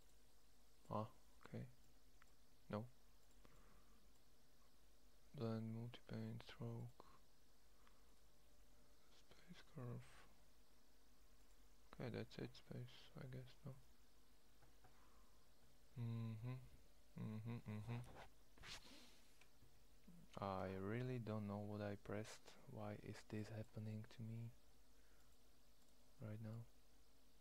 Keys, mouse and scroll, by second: 14.7-17.0 middle drag, 18.6 middle click, 19.3 Escape, 21.9-26.7 drag.